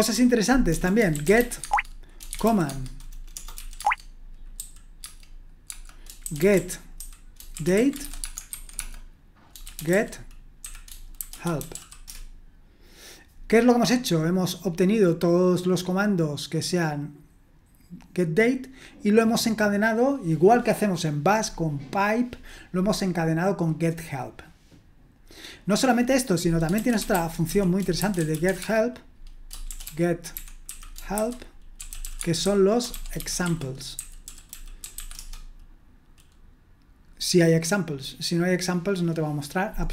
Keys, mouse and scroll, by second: 0.1-4.6 typing, 5.7-12.2 typing, 13.6-14.5 scroll up 1, 14.5-15.4 scroll down 2, 25.6 click, 26.5-35.4 typing.